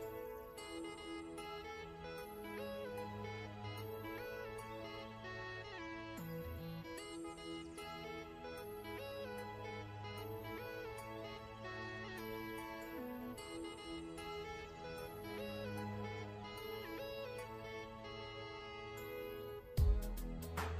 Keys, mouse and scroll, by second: 0.0-0.6 typing, 0.9 Return, 2.3-7.8 typing, 3.1 Return, 3.7 Return, 5.3 Return, 5.9 Return, 8.1 Return, 8.8 v, 9.3-9.7 scroll down 1, 9.7 click, 12.0 ctrl+z, 12.3 click, 13.1 ctrl+g, 13.5 click, 18.2 ctrl+scroll up 1, 18.9 click.